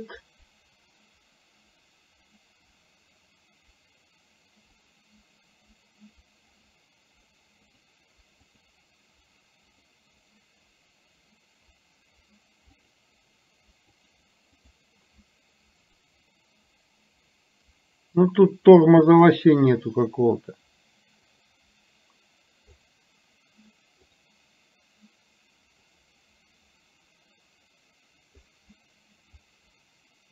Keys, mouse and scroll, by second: 4.8 click, 6.7 click, 7.8 click, 8.6 click, 9.7 click, 14.0 click, 14.7 click, 16.1-19.3 drag, 21.5 click, 22.8-24.3 drag, 26.0-28.5 drag, 29.5-30.3 drag.